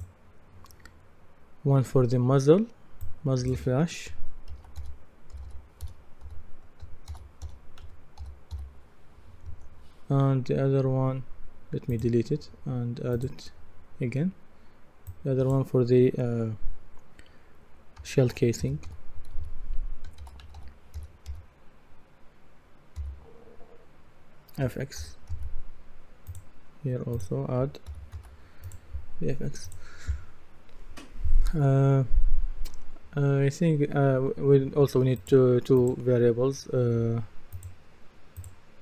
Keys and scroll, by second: 4.5-9.0 typing, 9.5 Return, 18.0-21.8 typing, 23.0 g, 25.0 shift+f, 25.3 shift+x, 27.9 shift+f, 28.1 shift+x.